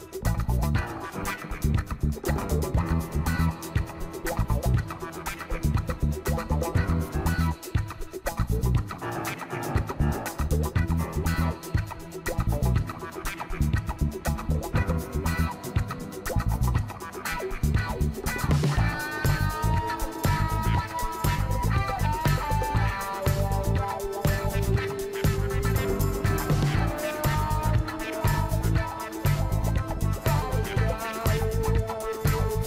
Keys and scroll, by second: 6.7 ctrl+t.